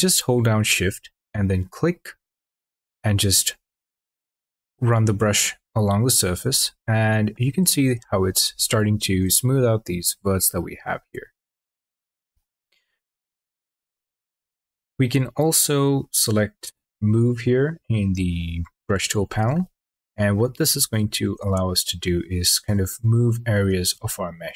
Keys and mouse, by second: 1.0 shift+click, 2.5 shift+click, 16.8 click, 21.7 shift+click, 24.0 ctrl+z.